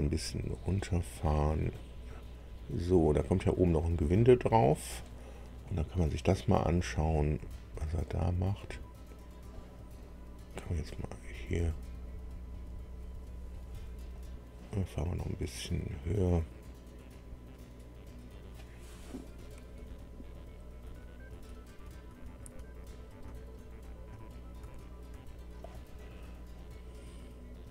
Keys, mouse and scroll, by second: 1.8 scroll down 1, 2.3-2.8 scroll down 1, 3.2-3.5 scroll down 1, 3.7-5.0 middle drag, 6.4-9.6 drag, 11.0 click, 14.1 click, 16.3 click, 17.1 scroll up 1, 19.7 Up, 20.8 Up, 21.3 Up, 21.7 Up, 22.1 Up, 22.4 Up, 23.2 Down, 23.5 Down, 24.1 Down, 24.6 Up, 25.1 Up.